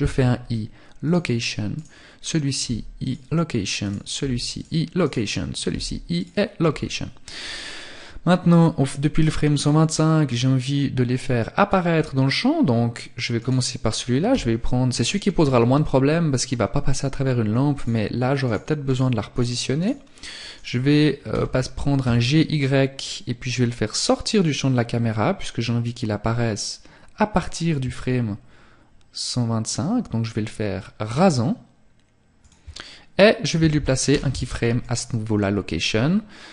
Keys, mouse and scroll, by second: 0.7 right click, 1.6 i, 2.8 right click, 3.2 i, 4.0 right click, 4.7 i, 7.0 click, 12.4 right click, 13.3 g, 16.8 right click, 20.3 g, 31.5 shift+click, 33.1 i, 35.9 click.